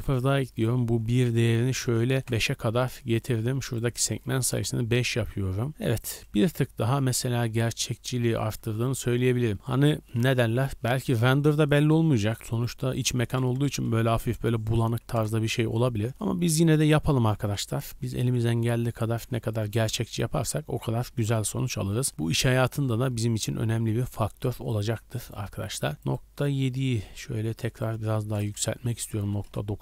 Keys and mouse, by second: 16.7 click, 17.3-18.0 shift+drag, 17.3 shift+b, 18.7-20.2 drag, 20.8-24.3 drag, 24.5 click.